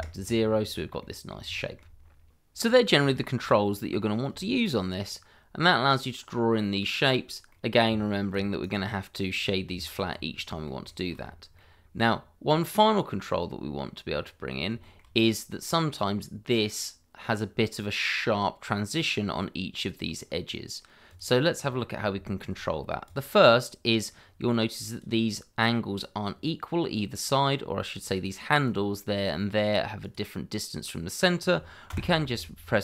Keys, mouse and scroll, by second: 0.6 scroll down 1, 1.0 middle click, 1.5 shift+middle click, 2.3-2.6 scroll up 1, 2.6 scroll down 1, 3.1 shift+middle click, 4.0 scroll up 1, 4.4 shift+middle click, 5.0 click, 7.5 middle click, 7.8 Tab, 8.6 right click, 9.3 click, 9.7 Tab, 10.4 middle click, 10.8 shift+middle click, 11.2 scroll up 1, 11.5 middle click, 14.1 scroll up 1, 14.8 shift+middle click, 15.1 scroll up 1, 15.5 middle click, 17.4 scroll down 1, 18.9 middle click, 21.0 click, 21.8 scroll up 1, 22.2 shift+middle click, 23.0 click, 26.3 scroll down 1, 27.5-27.9 scroll up 1, 27.9 click, 31.9 v.